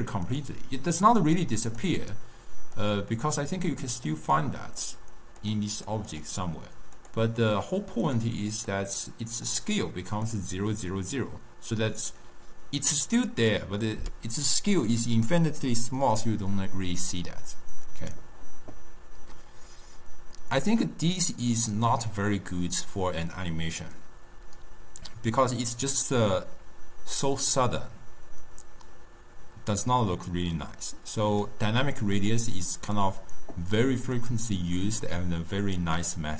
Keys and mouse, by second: 0.4 click, 1.5 drag, 2.9 drag, 4.2-5.5 middle drag, 5.5 click, 5.9 click, 6.2 click, 7.1 click, 8.1 click, 8.6 click, 9.6 click, 10.2 click, 20.9-23.9 drag, 32.3-36.3 drag.